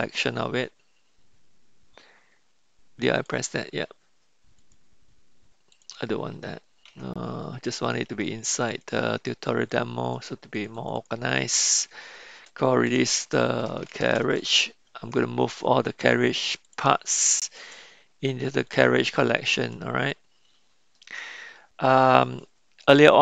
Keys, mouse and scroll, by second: 3.1 click, 5.7 click, 7.1 x, 8.1 click, 8.5 click, 8.9-10.1 drag, 10.9-15.5 drag, 13.7 r, 17.4 shift+click, 18.7-19.9 drag, 22.9-23.2 middle drag.